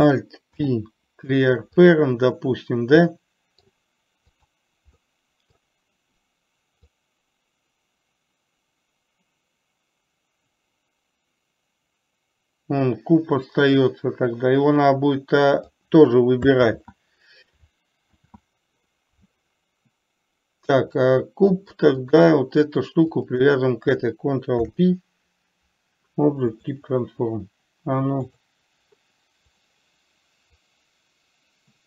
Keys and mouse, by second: 0.9 alt+p, 3.5-4.0 middle drag, 4.8 click, 5.4-6.0 middle drag, 7.4-16.1 drag, 17.1 ctrl+z, 21.4 middle click, 22.4 click, 24.9 ctrl+p, 29.9 click, 31.1-31.8 drag.